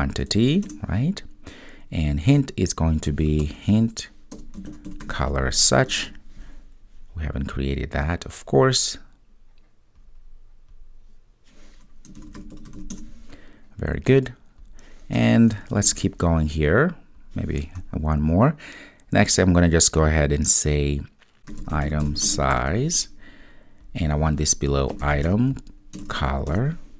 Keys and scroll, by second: 0.7 Return, 6.1 super+s, 16.0 super+v, 26.6 Return.